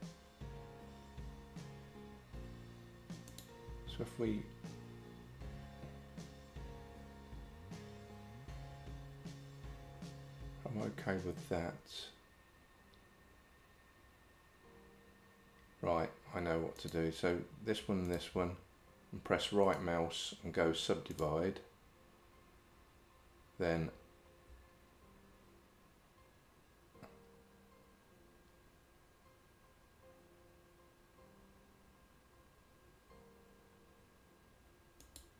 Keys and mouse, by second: 3.3 click, 16.8 click, 19.7-21.3 right drag.